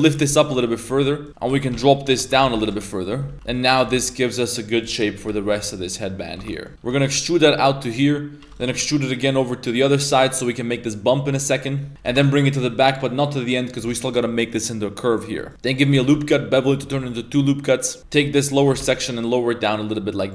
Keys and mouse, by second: 0.5 shift+middle drag, 0.8 2, 3.3 e, 3.7 g, 5.2 KP_3, 5.3 z, 11.5 shift+middle click, 11.5 shift+g, 11.9 ctrl+z, 11.9 e, 12.1 g, 15.5 ctrl+r, 16.0 ctrl+b, 18.0 z, 18.0 KP_3, 18.6 g.